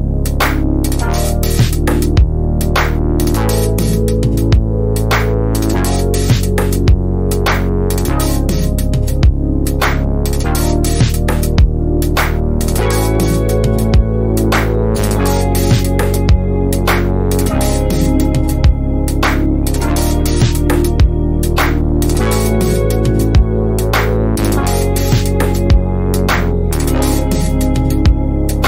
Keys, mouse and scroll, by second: 1.8 7, 2.0 Return, 3.2-5.0 drag, 5.0 z, 5.4 click, 5.8 b, 6.5 click, 10.2 ctrl+scroll down 1, 10.6 F1, 11.0 shift+right click, 11.5 ctrl+scroll up 1, 11.8 F2, 12.4 ctrl+alt+click, 12.9 F1, 13.5-14.5 drag, 16.7 shift+right click, 17.2 F1, 18.1-19.0 click, 19.2 ctrl+scroll up 1, 20.2-21.1 ctrl+scroll up 1, 22.3 click, 23.2 shift+click, 24.0 click, 24.7 5, 24.8 Return, 25.3 F2.